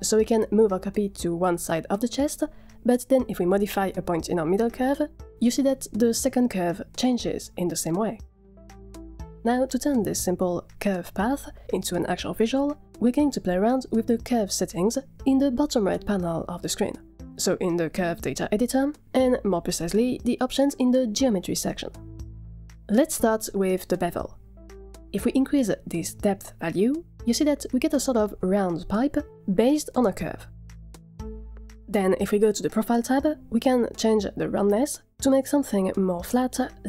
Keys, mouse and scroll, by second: 0.0 click, 0.3 Tab, 1.3 click, 2.0 g, 8.9 a, 9.1 a, 9.5 click, 10.5 z, 11.5-12.1 middle drag, 15.8 click, 17.6 click, 22.7 click, 22.9-23.5 scroll down 8, 26.9-29.3 drag, 29.7-31.9 middle drag, 33.9 click, 36.0-36.8 scroll down 5.